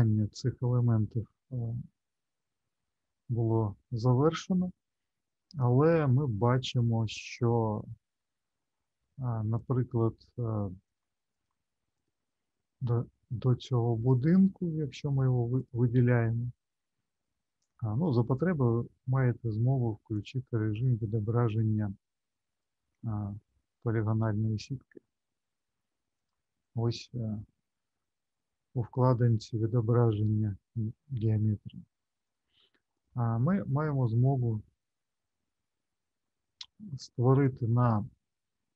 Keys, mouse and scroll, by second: 0.5 middle click, 1.9 shift+middle click, 7.5-8.2 scroll up 1, 8.2 middle click, 9.5 click, 10.9 click, 11.3 click, 11.9 click, 13.6 Tab, 14.1 click, 15.0 click, 15.5 click, 16.3 middle click, 20.2 click, 26.2 click, 32.2 click, 32.9 click, 37.8 shift+middle click.